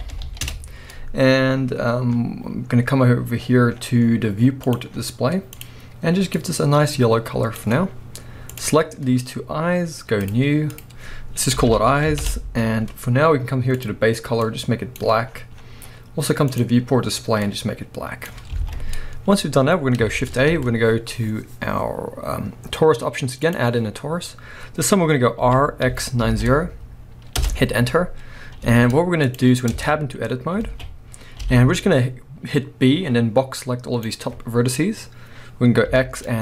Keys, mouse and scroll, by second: 0.0 l, 0.5 Return, 3.4-4.6 scroll down 1, 4.9-5.6 scroll down 1, 6.6-8.6 drag, 10.2-13.8 drag, 12.3 Return, 15.2-16.5 scroll down 1, 16.5 click, 18.6 alt+a, 20.2 shift+a, 23.8-25.4 scroll down 1, 25.4 r, 27.4 Return, 28.6 z, 29.7 Tab, 30.6 alt+a, 35.9 x.